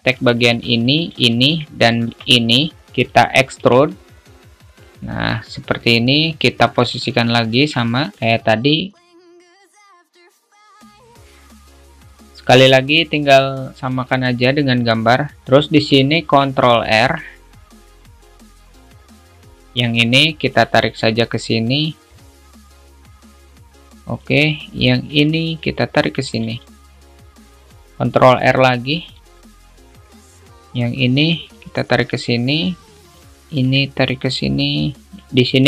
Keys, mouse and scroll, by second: 0.7 alt+shift+click, 1.2 shift+click, 1.5 shift+middle click, 5.8 scroll up 2, 9.2 click, 12.2 click, 12.4 g, 16.2 alt+shift+middle click, 17.3 ctrl+r, 23.3 click, 26.9 shift+middle click, 27.4 click, 28.7 ctrl+r, 33.2 click, 35.2 ctrl+r.